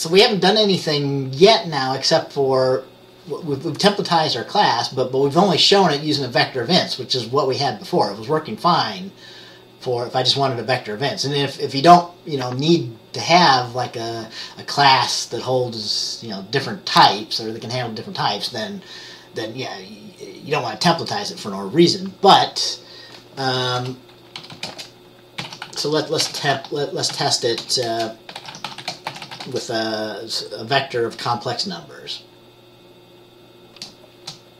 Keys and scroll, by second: 23.9 Return, 24.5-30.2 typing.